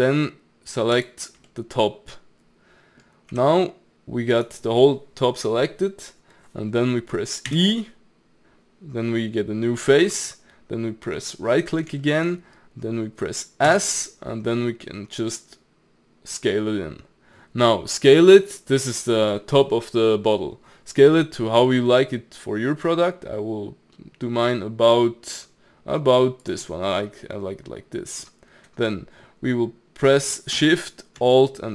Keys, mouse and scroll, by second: 1.0 alt+click, 1.5-3.3 middle drag, 3.3 g, 7.5 e, 11.5-13.7 middle drag, 13.7 s, 26.7-29.9 middle drag.